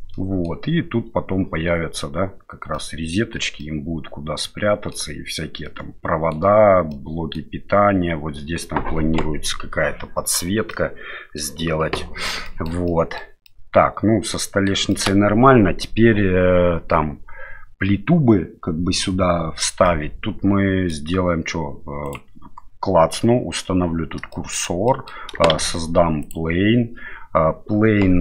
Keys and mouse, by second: 0.1-0.4 middle drag, 2.7-3.1 middle drag, 3.6-4.9 middle drag, 5.6-6.3 middle drag, 6.9-7.3 middle drag, 10.7-11.4 middle drag, 12.4 shift+middle click, 12.8-13.2 middle drag, 13.4-14.6 middle drag, 14.9 shift+middle drag, 19.8-20.9 middle drag, 24.3 shift+middle drag, 24.8 middle click, 25.5 shift+a.